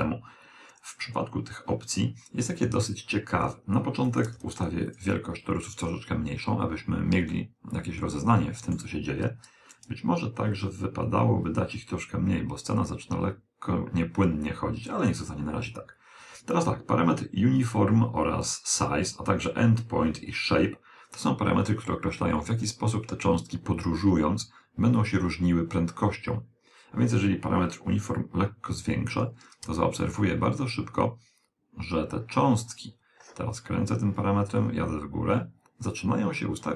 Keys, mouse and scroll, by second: 3.9 click, 5.6 click, 5.8-7.1 scroll down 2, 5.9 middle click, 7.1-9.0 middle drag, 10.2-11.9 scroll down 1, 28.0 click.